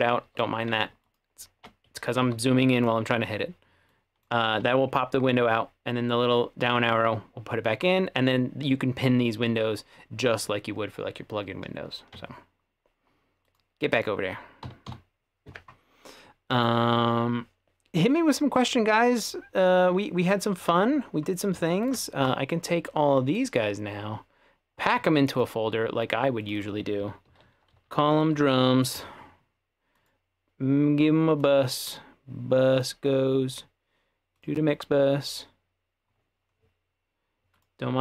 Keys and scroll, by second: 0.3 Escape, 2.3 Escape, 14.7 F2, 14.9 typing, 27.1-29.0 typing.